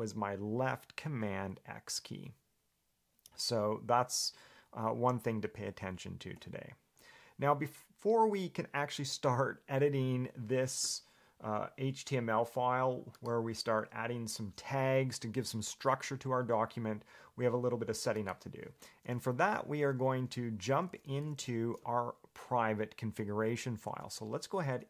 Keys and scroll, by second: 6.6 Escape, 18.8 Escape, 20.9 j, 21.1 j, 21.4 j, 21.6 j.